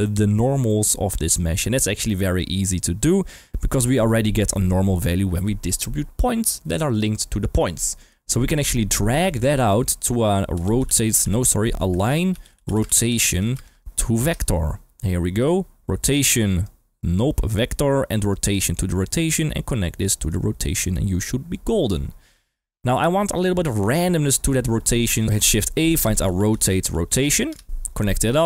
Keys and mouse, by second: 0.6-1.3 middle drag, 8.3 middle click, 9.4 drag, 12.4 a, 15.3 click, 16.6-17.4 drag, 18.3-18.8 drag, 19.6-20.3 drag, 23.7-25.0 drag, 25.2 ctrl+x, 25.2 shift+a, 25.5 shift+a, 28.2 click.